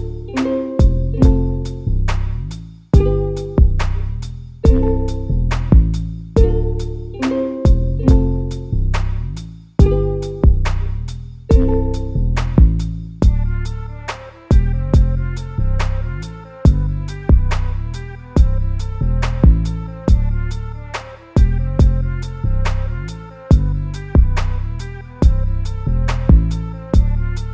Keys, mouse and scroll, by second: 1.8 a, 2.0 a, 2.8 shift+middle click, 3.8 click, 4.0 click, 4.3 g, 5.6 a, 5.8 a, 6.1 click, 6.3 click, 9.2 g, 11.2 a, 11.4 a, 11.6 3, 11.9 click, 12.5 g, 17.2 s, 18.5 g, 20.2 a, 20.3 a, 20.7 Tab, 21.0 a, 21.3 a, 23.4 click, 24.1 shift+d, 25.3 Tab, 25.6 a, 26.0 g.